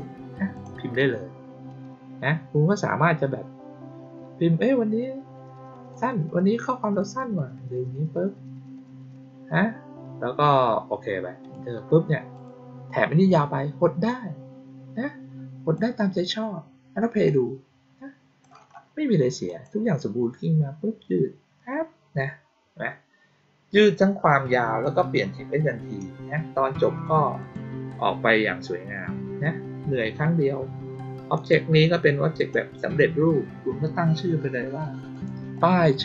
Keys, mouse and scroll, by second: 0.5 click, 11.3 click, 12.3 click, 14.0-15.7 drag, 17.2-18.3 drag, 19.4 click, 27.3 click, 31.3 click, 32.3 click, 35.0 click, 35.5 click.